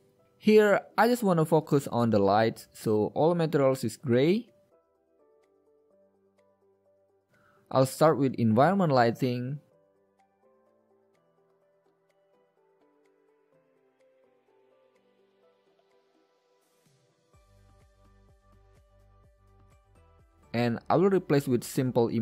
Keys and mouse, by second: 5.3 right click, 5.6 g, 6.8 shift+a, 12.0-13.4 drag, 12.9 shift+a, 13.7 p, 14.8-16.5 drag, 16.6-18.3 drag, 16.7 shift+a, 19.5-20.9 drag, 20.9 middle click, 21.0 click.